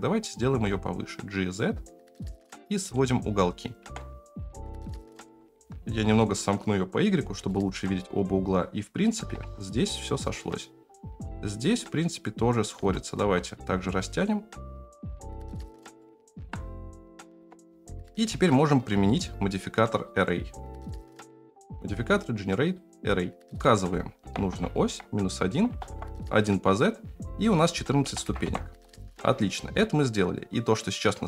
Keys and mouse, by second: 0.4 g, 3.8 Tab, 4.5 Tab, 5.0 a, 5.3 s, 7.4 shift+middle click, 9.4 shift+middle click, 12.8 s, 16.0 shift+middle click, 17.3 Tab, 18.0 middle click, 19.1 click, 20.2-22.7 drag, 23.7-25.9 drag, 27.6 click.